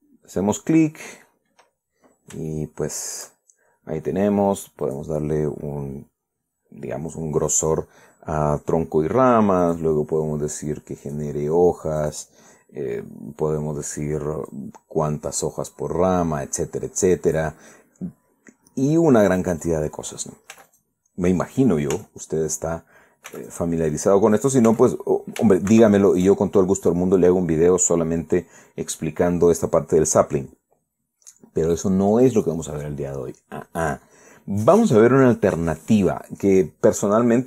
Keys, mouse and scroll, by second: 0.7-1.2 scroll down 2, 3.2 shift+middle click, 5.5 click, 10.3 click, 11.7 click, 12.7 click, 15.2-18.2 drag, 18.9-19.3 scroll down 2, 19.3 scroll up 2, 20.2 right click, 21.2 z, 21.4 click, 22.6 z, 24.0 x, 24.1 click, 25.0 right click, 25.4 x, 25.5 click, 26.4 shift+c, 27.1-27.7 shift+scroll down 3, 33.0 right click.